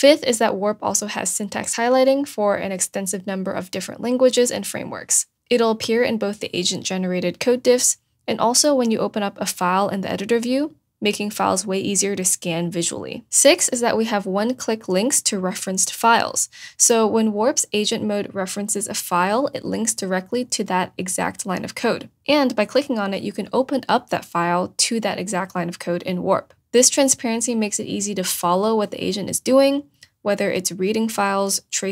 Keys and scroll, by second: 5.9 BackSpace, 6.3 BackSpace.